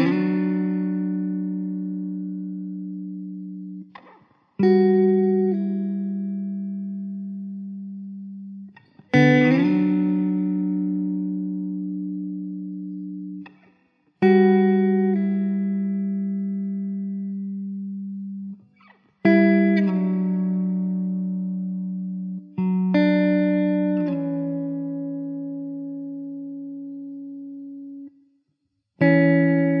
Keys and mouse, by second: 0.6 middle click, 3.1 middle click, 5.5 1, 18.9 2, 21.8 1, 27.4 middle click, 27.8 2.